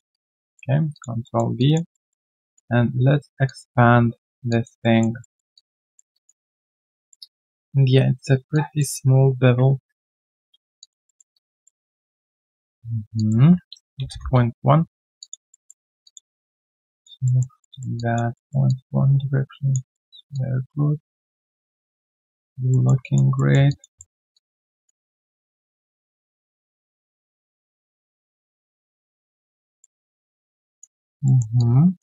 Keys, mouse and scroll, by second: 0.1 alt+right click, 0.4 alt+middle click, 0.7 alt+right click, 0.9 alt+click, 1.2 alt+middle click, 1.5 alt+click, 1.9 alt+middle click, 2.2 alt+click, 4.5 alt+click, 4.8 alt+middle click, 5.5 alt+click, 5.8 alt+middle click, 6.1 alt+click, 6.3 alt+right click, 6.5 alt+click, 6.9 alt+middle click, 7.1-7.5 alt+scroll down 1, 8.5 alt+click, 9.2 ctrl+a, 10.8 alt+click, 11.0 alt+middle click, 11.3 alt+click, 11.6 alt+middle click, 11.9 alt+click, 12.3 alt+middle click, 13.8-14.5 typing, 15.2 alt+click, 15.5 alt+middle click, 15.8 alt+right click, 16.0 alt+click, 16.3 alt+middle click, 16.6 alt+right click, 16.8 alt+click, 17.2 alt+middle click, 17.9 alt+click, 18.3 alt+middle click, 18.6 alt+click, 19.9 alt+middle click, 20.3 alt+click, 22.4 alt+right click, 22.7 alt+middle click, 23.0 alt+click, 23.3 alt+middle click, 23.6 alt+click, 23.9 alt+middle click, 24.3 alt+click, 27.2 alt+click, 29.0 alt+middle click, 29.3 alt+scroll down 1, 29.6 alt+middle click, 30.0 alt+click, 30.3 alt+middle click, 30.7 alt+click, 30.9 alt+scroll down 1, 31.2 alt+middle click, 31.5 alt+click.